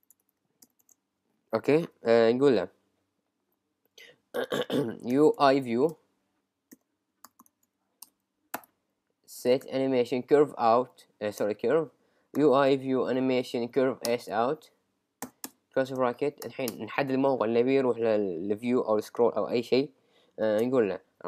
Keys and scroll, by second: 5.1 shift+{, 7.4 shift+|, 9.3 shift+s, 10.8 Up, 11.4 Return, 14.1 Return, 14.5 Right, 15.5 Return.